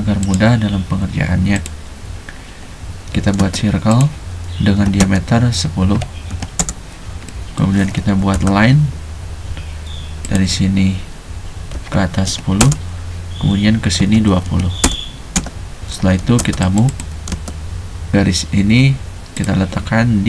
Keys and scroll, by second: 0.0 space, 3.2 c, 3.4 space, 4.8-6.6 typing, 8.2 typing, 11.7-12.6 typing, 14.0-16.2 typing, 17.3 space.